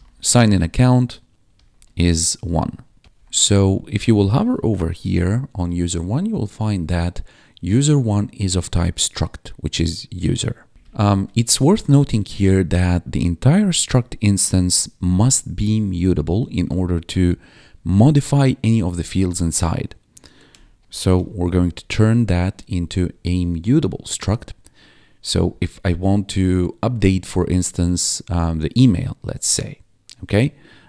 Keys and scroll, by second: 0.0-3.1 typing, 0.4 Tab, 2.6 Down, 5.1 ctrl+4, 10.7 Return, 11.2 ctrl+s, 15.1 Up, 17.5 ctrl+Right, 20.4-21.6 typing, 21.7 ctrl+s, 22.3 Escape, 22.9 Down.